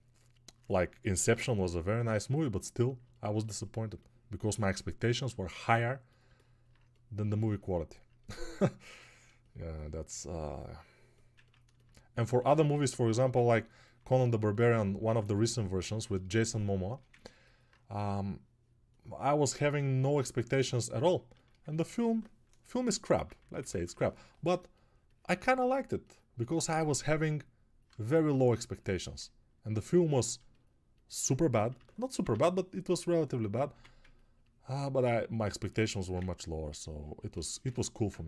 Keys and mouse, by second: 34.0 1.